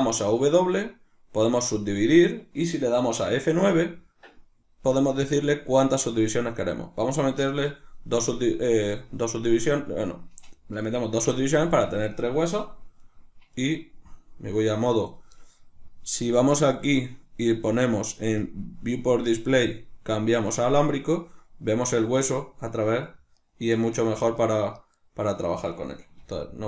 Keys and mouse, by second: 0.0 w, 12.9 right click, 13.5 right click, 21.7 right click, 22.4 right click, 22.7 right click, 23.0-24.4 right drag, 24.8 right click, 25.0 right click, 26.2 g.